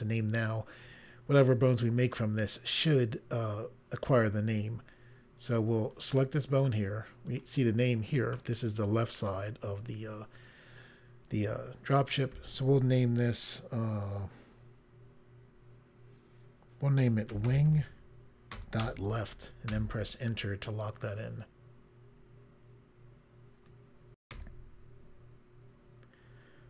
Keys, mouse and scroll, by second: 5.9 click, 7.3 click, 17.0-19.0 typing, 19.7 Return, 24.2 Insert, 25.5 Pause.